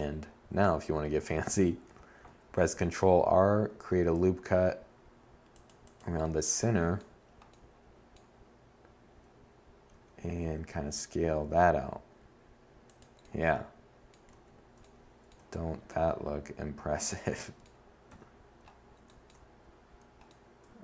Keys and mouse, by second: 0.0 a, 0.6 ctrl+r, 6.2 middle click, 8.0 z, 8.5 s, 12.4 a, 13.5 Tab, 16.1 7, 19.0 Tab, 20.3 z, 20.7 z.